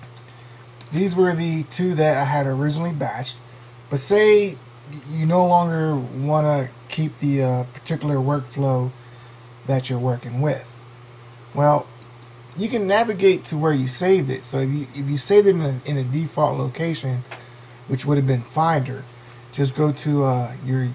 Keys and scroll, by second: 9.2 super+~.